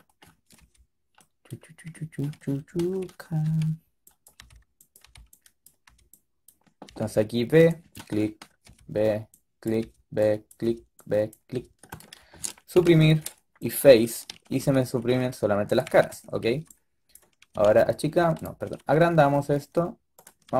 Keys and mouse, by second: 0.5 b, 2.5 middle click, 3.4 b, 4.3 b, 4.9 b, 5.8 b, 6.8 b, 8.6 b, 9.7 b, 10.6 b, 11.4 b, 11.9-14.4 drag, 12.6 Delete, 14.4 a, 15.8 a, 16.2 a, 16.3 a, 16.4 b, 17.4 s, 18.5 s.